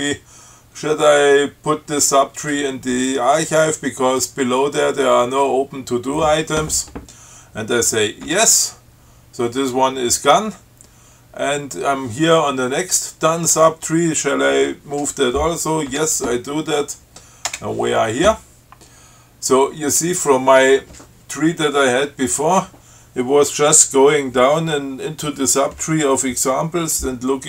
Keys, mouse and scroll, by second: 8.5 y, 16.1 y, 17.8 Return.